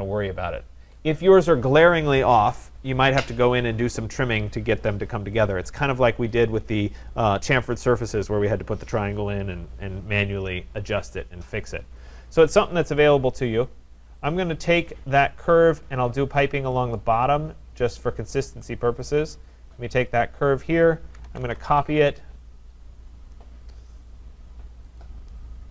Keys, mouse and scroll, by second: 1.6-2.0 scroll, 12.7-14.2 scroll, 14.3 click, 15.2 scroll, 15.6 Escape, 15.9 scroll, 16.7 right click, 17.0-17.8 scroll, 19.1 click, 20.2 click, 20.9-22.2 typing, 22.6 Return, 25.0 click.